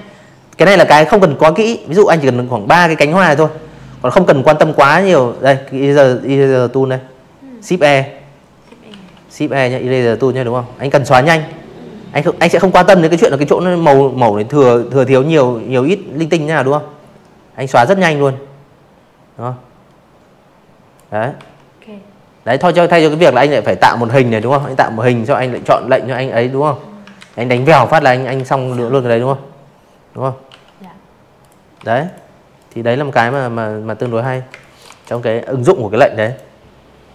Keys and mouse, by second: 1.5 click, 5.8 shift+e, 11.7-17.9 drag, 18.3 v, 21.0 n, 21.3 m, 21.5 click, 22.3 v, 24.1 ctrl+z, 24.5 v, 24.9 click, 25.3 ctrl+z, 27.4 e, 28.4 click, 28.7 v, 29.0 click, 29.5 click, 30.1 click, 31.0 v, 31.1 click, 31.4 space, 31.5 click, 31.8 v, 31.9 click, 33.2 click, 34.1 click, 34.7 Delete, 35.7 ctrl+z, 36.1 ctrl+z, 36.5 ctrl+z, 37.0 ctrl+z.